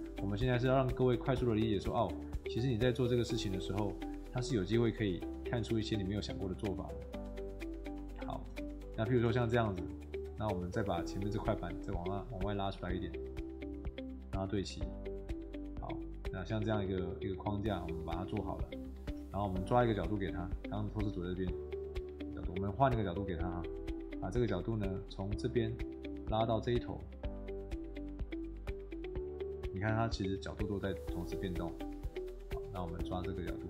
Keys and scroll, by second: 5.3 Escape, 6.6 Escape, 8.4 shift+Escape, 13.5 Escape, 15.1 Escape, 18.2 shift+Escape.